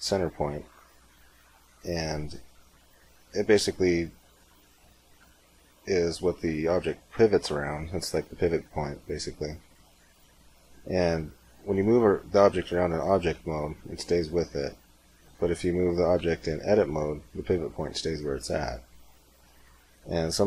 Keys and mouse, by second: 5.1 r, 11.5 g, 15.9 Tab, 16.4 g, 19.9 Tab.